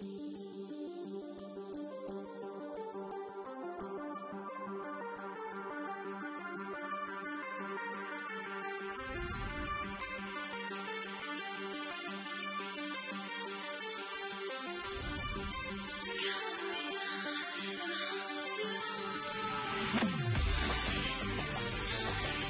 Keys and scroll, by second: 0.4 ctrl+alt+g, 2.5 Delete, 5.3 ctrl+t, 10.3 alt+shift+Return, 13.0 ctrl+i.